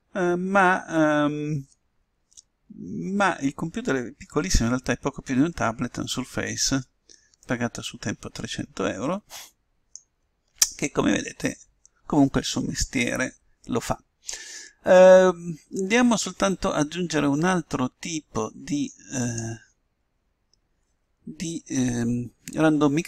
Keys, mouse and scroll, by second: 8.6-10.4 middle drag, 20.2-21.8 drag.